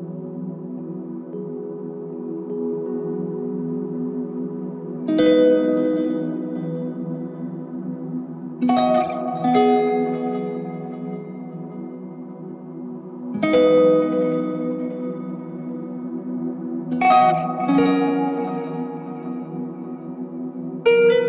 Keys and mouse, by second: 0.2 ctrl+click, 11.8 typing, 13.2 alt+click, 14.5 alt+click.